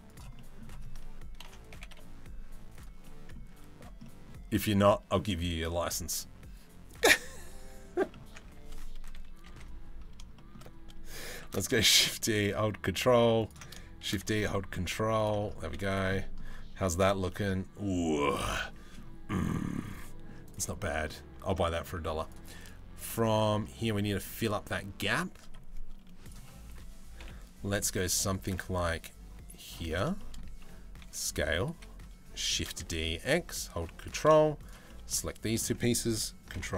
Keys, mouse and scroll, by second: 0.0 middle click, 1.0 ctrl+l, 1.3 g, 2.7 middle click, 3.2 Tab, 3.7 middle click, 7.6 middle click, 7.9 Tab, 8.1 a, 8.8 KP_3, 9.1 KP_1, 10.0 shift+middle click, 11.1 shift+d, 13.7 shift+d, 15.2 z, 15.8 middle click, 16.4 Tab, 16.9 middle click, 18.2 middle click, 19.1 middle click, 19.6 middle click, 20.4 middle click, 20.9 Tab, 21.1 middle click, 21.5 Tab, 21.9 middle click, 22.7 middle click, 23.9 middle click, 25.9 click, 26.8 KP_7, 28.1 shift+d, 29.8 shift+middle click, 30.6 s, 32.2 shift+d, 34.3 shift+middle click, 34.5 middle click, 36.2 ctrl+l.